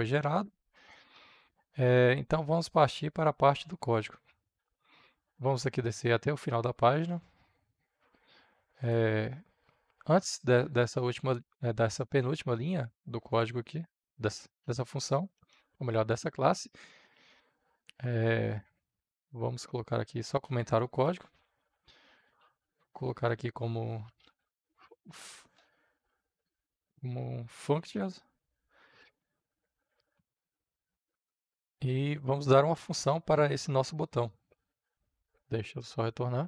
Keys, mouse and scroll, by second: 8.7-14.6 drag, 14.6 Tab, 15.1 Return, 16.4 Up, 17.1 Tab, 20.3 shift+3, 20.7 Return, 21.1 shift+3, 21.4 Return, 21.8 shift+3, 22.3 Up, 22.6 space, 23.8-25.6 typing, 26.3 Return, 27.2-28.8 typing, 29.9 Down, 30.4 Return, 34.9-36.4 drag.